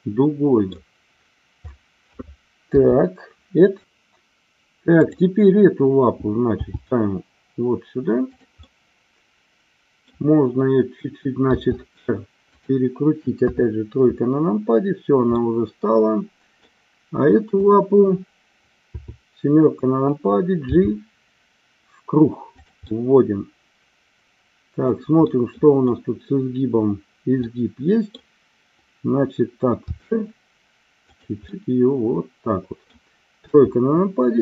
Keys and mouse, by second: 2.7 KP_7, 6.6 g, 8.7-10.2 middle drag, 11.5 r, 12.5 click, 13.3 KP_3, 15.3-16.7 middle drag, 17.6 click, 18.8 KP_7, 20.8 g, 22.6 click, 22.9-24.1 middle drag, 25.2-25.7 middle drag, 27.4-28.2 middle drag, 29.9 r, 31.1 click, 31.5-33.0 middle drag, 33.4 KP_3.